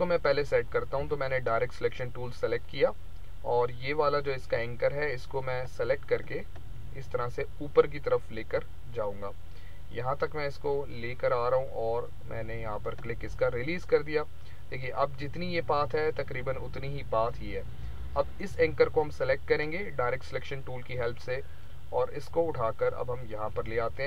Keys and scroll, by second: 0.9 a.